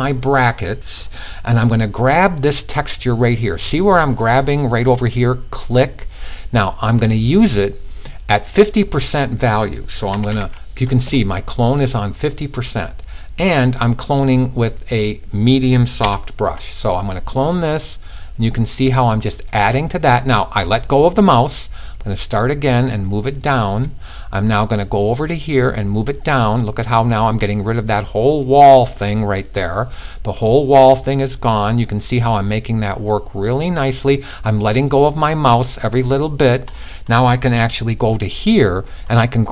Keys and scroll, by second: 9.7 typing.